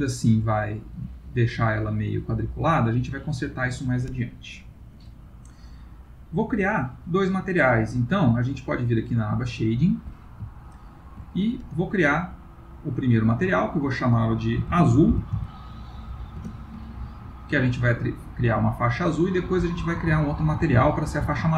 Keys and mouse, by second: 3.0 ctrl+middle click.